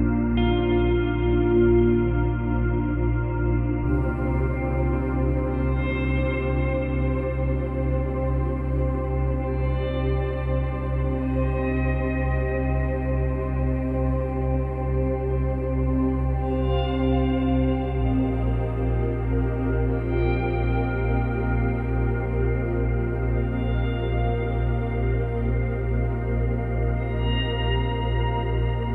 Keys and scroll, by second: 5.1 space, 6.2 space, 10.1 space, 11.3 space, 14.5 ctrl+c, 14.7 ctrl+v, 21.1 ctrl+z, 22.2 ctrl+c, 22.3 ctrl+v.